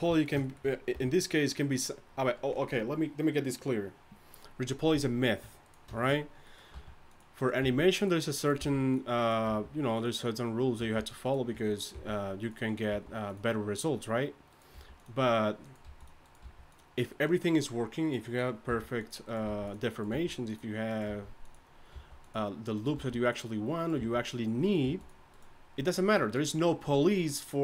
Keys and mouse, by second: 0.9 r, 4.3 r, 5.6-6.7 right drag, 6.7 g, 7.6 g, 8.6 g, 9.5 g, 11.9 g, 12.9 g, 14.7 g, 15.8 g, 16.4 g, 18.7-21.9 typing, 23.0 g, 24.0 g, 24.8 g.